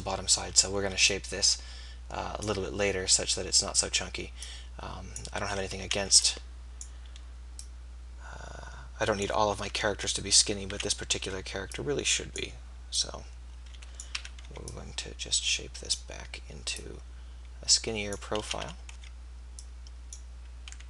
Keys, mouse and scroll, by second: 0.8 b, 2.9 b, 5.8 a, 6.2 b, 7.7-9.3 drag, 10.7 ctrl+z, 10.7 a, 11.3 b, 13.5 click, 14.1 a, 14.5 b, 18.5 a, 19.1 b.